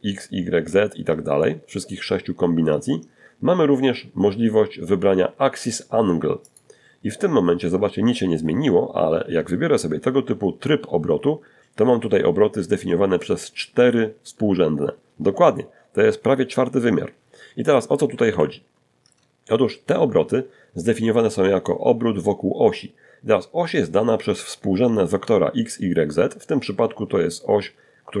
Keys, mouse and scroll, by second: 4.7 click, 16.5 alt+r, 17.6 shift+middle click.